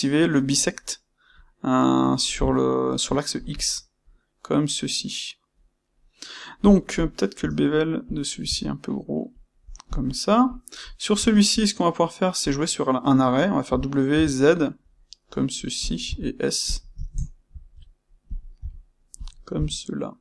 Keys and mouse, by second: 6.9 click, 7.3 space, 9.9 click, 10.4 click, 11.1 space, 17.0-20.2 ctrl+shift+middle drag.